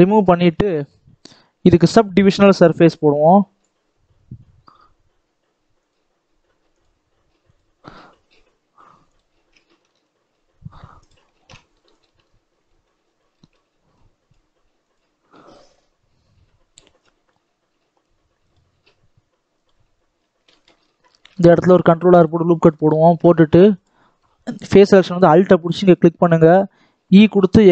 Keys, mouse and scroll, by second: 3.5 click, 4.0 scroll down 1, 4.3-5.4 scroll up 1, 6.6 click, 7.4 click, 7.9-9.0 scroll up 1, 9.0 click, 9.8 alt+a, 10.9 click, 11.3 alt+a, 11.9 alt+click, 12.1-12.6 scroll down 5, 12.6 shift+middle click, 12.9-13.2 scroll down 1, 13.2 shift+middle click, 13.9 click, 19.8-20.4 scroll up 2, 20.4 shift+middle click, 20.7-21.2 scroll up 1, 21.2 ctrl+r, 22.4-23.7 scroll up 3, 22.6 shift+middle click, 23.7-25.8 drag, 27.0 e.